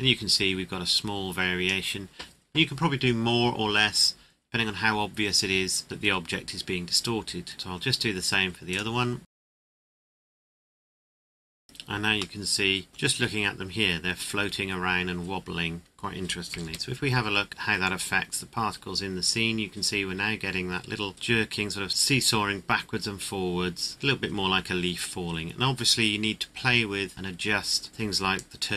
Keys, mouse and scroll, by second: 5.2-6.6 scroll down 1, 7.5 click, 8.7 right click, 9.2 click, 9.3 a, 9.5 KP_Enter, 9.7 click, 9.9 click, 10.2 click, 10.4 click, 10.5 click, 10.9 click, 11.1 click, 11.3 KP_Enter, 12.3 middle click, 12.9 scroll down 1, 15.9-16.6 scroll down 1, 16.6 KP_0, 17.5-18.1 scroll up 1, 18.1-18.6 scroll down 1, 27.9 right click, 28.5 click.